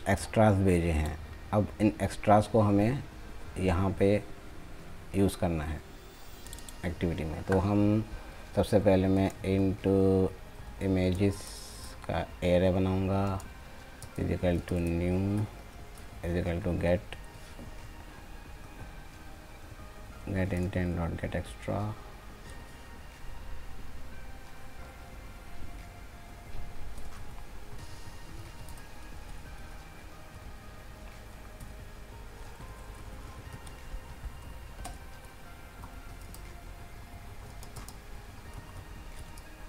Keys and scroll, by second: 14.7 ctrl+space, 27.8 ctrl+z, 28.6 ctrl+space.